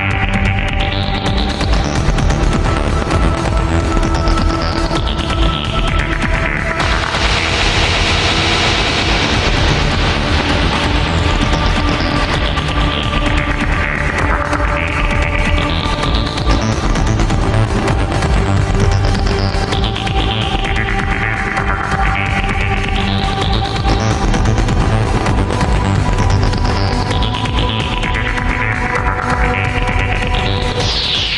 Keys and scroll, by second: 15.0 ctrl+x, 15.3 ctrl+2, 21.4 ctrl+z.